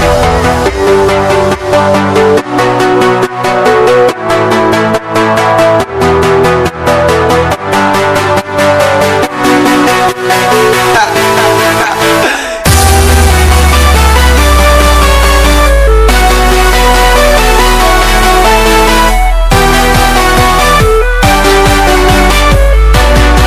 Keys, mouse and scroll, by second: 2.1 click, 6.3-11.2 drag, 11.0 c, 12.9 click, 15.1 click, 18.9 ctrl+v, 20.8 scroll up 1, 21.3 scroll down 1, 21.6 scroll up 1, 22.1 scroll down 1.